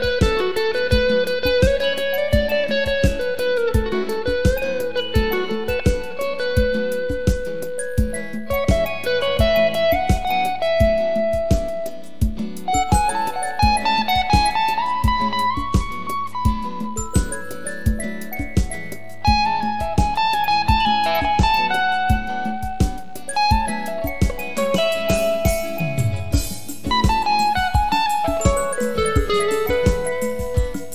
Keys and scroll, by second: 26.9-27.9 typing.